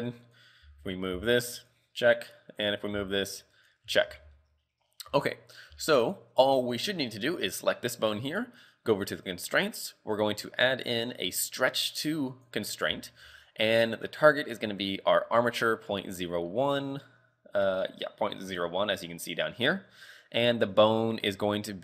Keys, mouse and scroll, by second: 0.3 right click, 0.7 r, 1.2 r, 2.3 right click, 2.7 right click, 3.0 r, 4.2 z, 4.5 shift+middle click, 4.7-5.1 scroll up 2, 5.1 z, 5.8 shift+middle click, 7.7 right click, 9.1 click, 9.7 click, 13.0 shift+middle click, 14.0 click, 17.3 scroll down 3, 20.6 click.